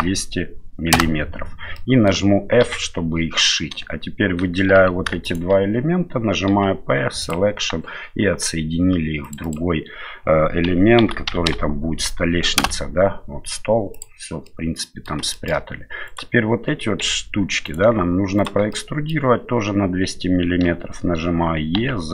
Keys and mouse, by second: 1.7 middle click, 2.6 f, 4.7 3, 6.5 p, 9.2 click, 9.4-13.2 drag, 13.9 click, 14.4 middle click, 15.3 shift+middle click, 16.1 right click, 17.0 2, 17.6 right click, 18.4 shift+right click, 18.7 middle click, 20.6 e.